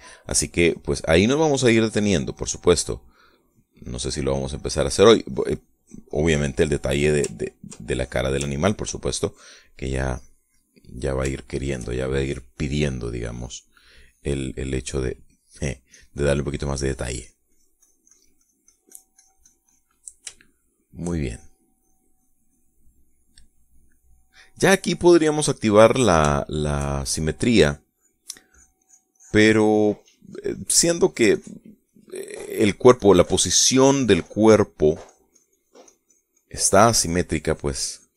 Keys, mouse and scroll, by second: 0.1 click, 0.3 click, 2.7-3.8 middle drag, 4.1-7.7 drag, 8.1 ctrl+click, 8.6 ctrl+click, 9.2 ctrl+click, 9.9 ctrl+click, 10.7 middle click, 11.2 middle click, 12.1 shift+middle click, 15.7-20.7 drag, 21.1 shift+middle click, 22.0 shift+click, 22.5 shift+click, 23.8-24.8 drag, 25.5 click, 26.1 click, 27.1-28.1 shift+drag, 28.3-38.1 shift+drag.